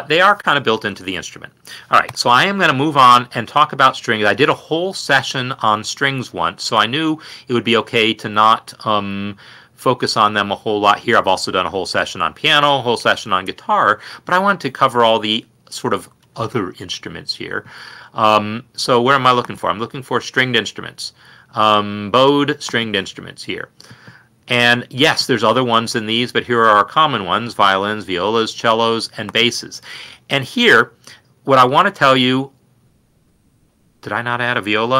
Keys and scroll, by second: 2.2 i.